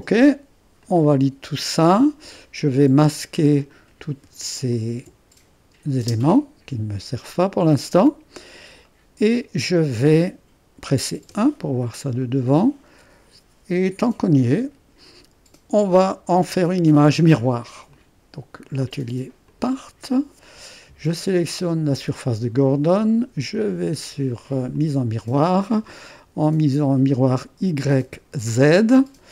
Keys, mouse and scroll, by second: 0.2 click, 5.6 click, 6.1 space, 7.4-8.4 drag, 8.9 click, 11.0-11.7 typing, 12.2-15.3 drag, 17.9-20.8 drag, 21.7-23.6 drag, 24.8 click.